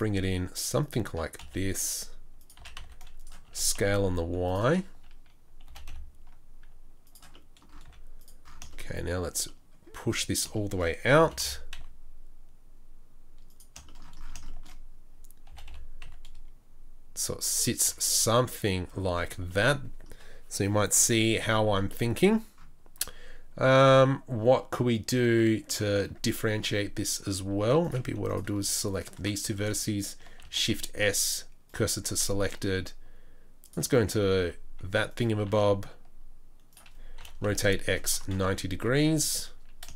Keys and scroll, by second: 0.0 g, 1.4 s, 2.6 s, 3.4 s, 5.7 g, 7.8 g, 7.8 z, 11.2 g, 15.5 g, 17.8 Tab, 19.0 Tab, 21.7 Tab, 22.9 Tab, 26.3 Tab, 27.6 1, 28.0 z, 30.4 shift+s, 32.1 shift+a, 34.4 s, 35.4 s, 37.2 r, 38.4 KP_3, 38.8 KP_1, 39.2 KP_3.